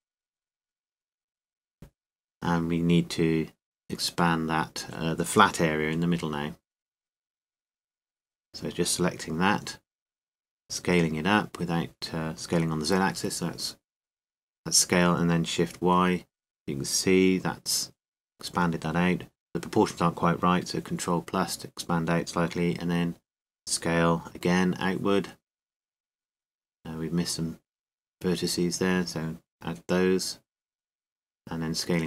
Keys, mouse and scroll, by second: 0.1-1.9 drag, 1.9 z, 5.5 a, 6.6 c, 10.6-12.3 right drag, 12.0-13.5 middle drag, 13.5 z, 14.1 s, 19.4 click, 20.0-21.8 right drag, 21.8 middle click, 24.6 s, 28.8-32.0 middle drag.